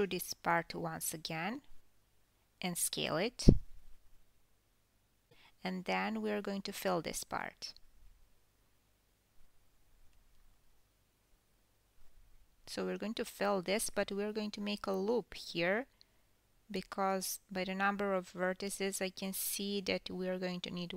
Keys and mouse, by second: 0.0-2.8 typing, 8.2-10.5 drag, 10.6 shift+click, 11.3 shift+click, 11.7 shift+click, 13.1 f, 14.3 ctrl+r, 16.2 KP_1, 18.7 g.